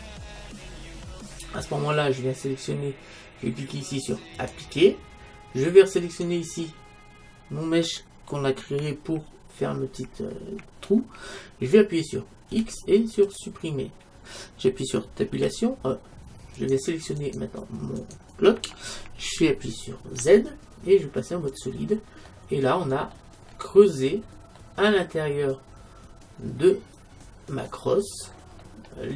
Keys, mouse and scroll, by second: 0.8 middle click, 4.4-6.2 drag, 6.0-12.6 right drag, 12.6 x, 15.3 Tab, 17.3-19.2 right drag, 20.2 z, 22.3-26.5 middle drag, 28.0-29.1 middle drag.